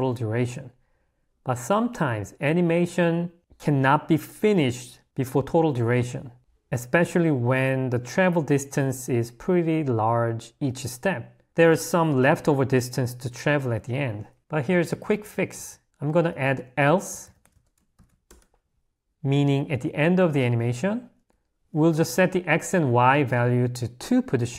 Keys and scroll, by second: 14.4-15.1 typing, 16.3 a, 21.5 i.